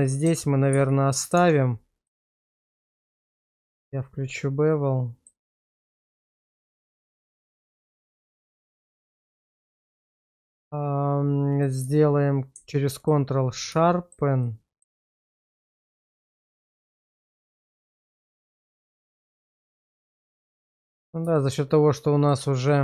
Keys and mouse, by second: 0.7 ctrl+x, 1.3 Tab, 2.0 middle click, 3.7 click, 4.7 middle click, 5.9 shift+right drag, 6.5-8.0 middle drag, 8.5 shift+middle click, 9.5-10.5 middle drag, 11.8 q, 13.9 shift+middle drag, 14.4-14.8 middle drag, 15.0 shift+middle click, 15.2 Tab, 15.8 shift+middle click, 16.4 click, 16.8 middle click, 17.2 shift+middle click, 18.8 q, 20.0 shift+middle click, 20.4 middle click, 21.4 middle click, 22.7 middle click.